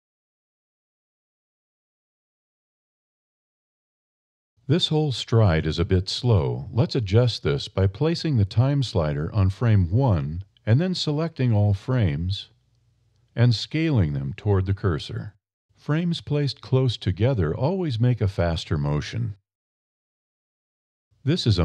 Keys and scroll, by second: 13.7 a, 15.1 s.